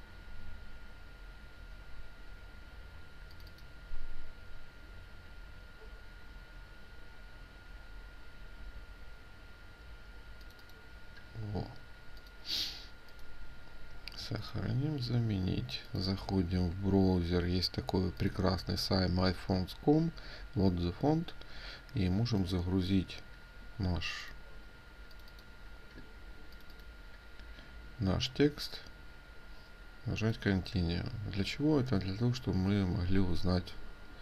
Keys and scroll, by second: 33.0 f.